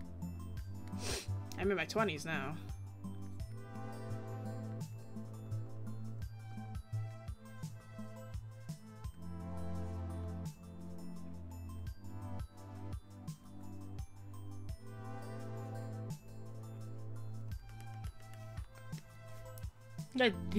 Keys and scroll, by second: 17.8 scroll down 1.